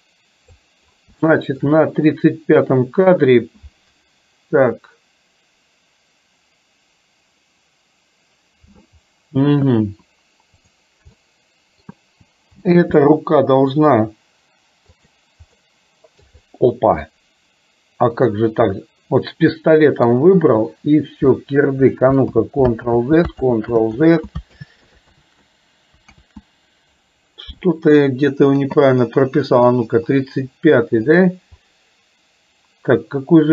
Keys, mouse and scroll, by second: 1.2 shift+middle click, 11.2-11.9 middle drag, 12.6 g, 15.7 middle click, 17.2-20.1 middle drag, 22.4 ctrl+z, 23.0 ctrl+z, 23.6 ctrl+z, 24.1 ctrl+z, 24.7 ctrl+z, 25.4 ctrl+z, 26.4 ctrl+z, 29.7 click.